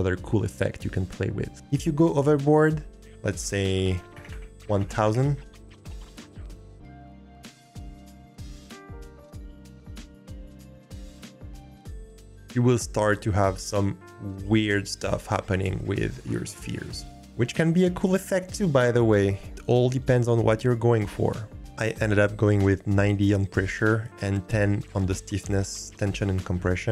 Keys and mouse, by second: 2.9-5.1 drag, 4.3 0, 6.1 click, 16.6-17.1 drag, 21.3-22.5 middle drag.